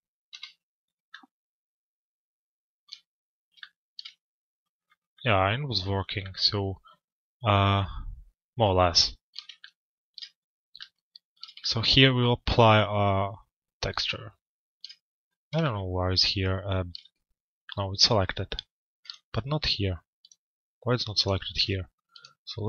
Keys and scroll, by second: 0.3 p.